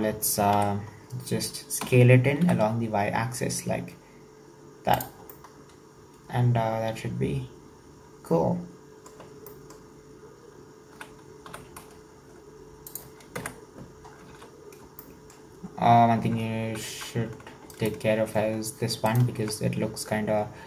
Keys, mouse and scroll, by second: 0.5 KP_3, 1.2-1.8 scroll up 4, 1.9 s, 5.3 scroll down 1, 5.4-8.4 middle drag, 9.4-10.9 middle drag, 10.9 s, 13.3 KP_1, 14.3 alt+z, 14.5-15.0 scroll up 4, 15.0-16.0 shift+middle drag, 16.0-16.4 scroll down 2, 16.4-16.8 scroll up 2, 16.8 2, 17.8 alt+right click, 19.1 alt+shift+right click.